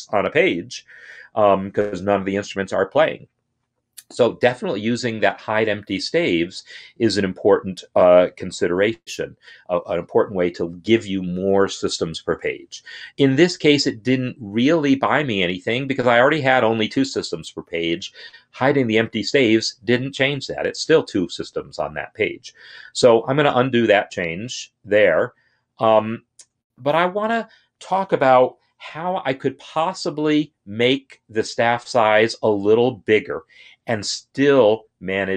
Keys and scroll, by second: 23.4 ctrl+z.